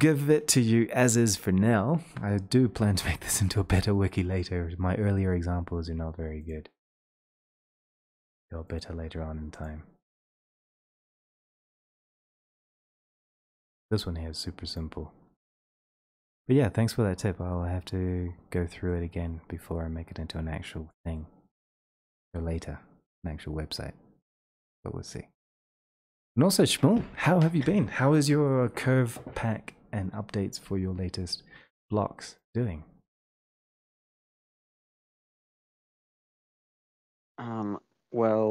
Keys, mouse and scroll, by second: 2.0 middle click, 6.5 click, 8.8 click, 9.7 click, 11.7 click, 12.3 click, 13.1 click, 14.8 middle click, 16.2 click, 17.1-17.8 scroll, 17.8-18.6 scroll, 18.9 middle click, 19.6-20.9 scroll, 23.2 click, 32.5 click.